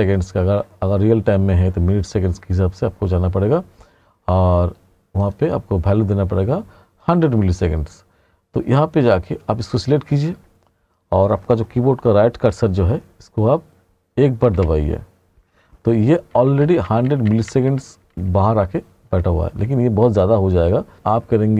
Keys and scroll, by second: 14.6 ., 16.4 r, 18.1 r, 20.6 r.